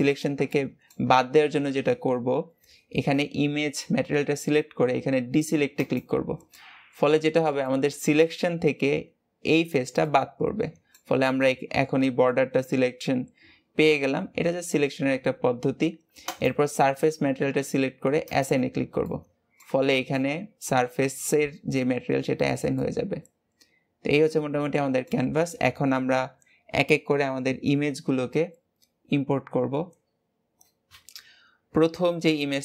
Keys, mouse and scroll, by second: 5.8 click, 6.6-12.5 middle drag, 12.5-13.5 scroll up 2, 13.5-15.6 scroll up 1, 16.2 click, 18.3 click, 18.7-19.0 scroll down 2, 19.0 middle click, 19.7 Tab, 20.2-25.7 middle drag, 25.7-28.7 scroll down 1.